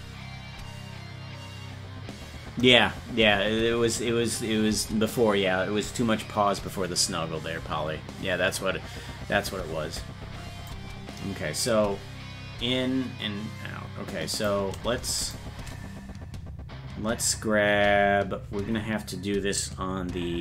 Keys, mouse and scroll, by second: 10.7-14.5 drag, 15.3 shift+right click.